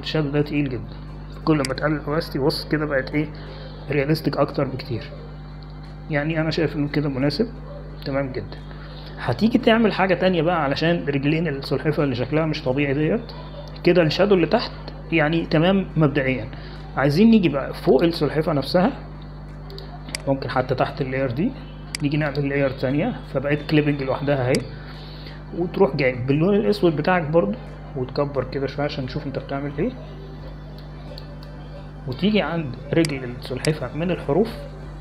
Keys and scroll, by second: 30.4 ctrl+=, 30.6 ctrl+=, 30.8 ctrl+=, 31.0 ctrl+=, 31.4 ctrl+=, 32.6 ctrl+space.